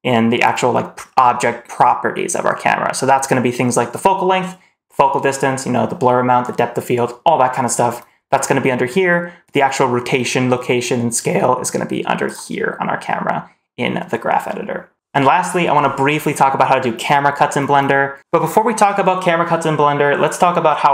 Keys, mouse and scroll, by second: 9.3 click, 12.1 click, 18.2 Delete, 18.2 click.